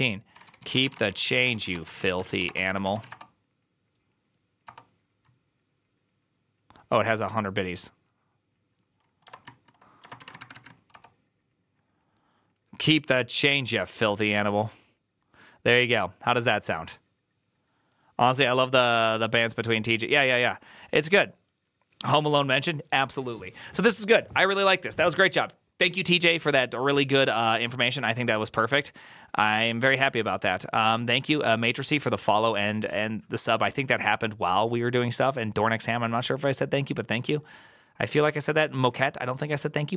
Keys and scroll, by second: 0.0-5.0 typing, 9.8-10.9 typing.